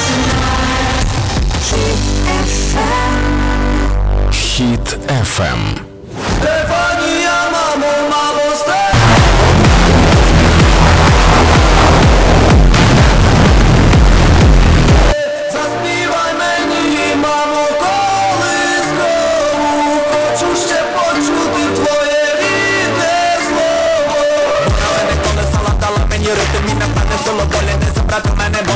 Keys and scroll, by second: 15.3 Page_Down.